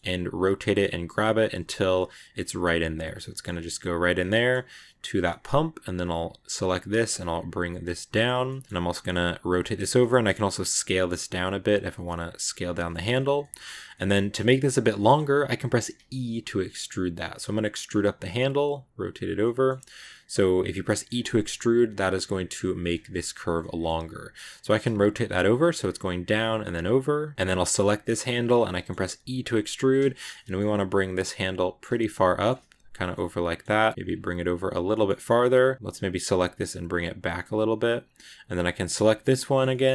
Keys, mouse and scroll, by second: 0.0 g, 0.4 middle click, 0.9 r, 1.8 middle click, 2.5 g, 3.1 middle click, 4.0 scroll down 2, 4.2 middle click, 4.5 g, 5.0 scroll down 1, 5.1-6.2 middle drag, 6.2 right click, 6.4 middle click, 7.1 g, 8.3 middle click, 9.1 r, 12.8-14.0 shift+middle drag, 14.0-14.4 scroll up 1, 14.4 g, 14.8 middle click, 15.8 e, 17.3 middle click, 17.9 r, 19.3 middle click, 19.6 g, 20.5 middle click, 21.0 g, 22.0 right click, 22.2 middle click, 22.5 g, 23.3 right click, 23.4 middle click, 23.9 g, 24.4 middle click, 25.4-25.8 scroll up 2, 27.1 scroll down 1, 27.3 right click, 27.6 middle click, 28.3 shift+scroll up 1, 28.4 scroll down 1, 28.5 middle click, 28.9 e, 30.0 shift+middle click, 30.6 g, 31.2-32.4 middle drag, 32.4 g, 33.0 middle click, 33.5 g, 34.5 right click, 34.8 shift+middle click, 35.7 right click, 37.2 right click, 37.3 g, 38.6 right click, 38.9-39.9 shift+middle drag.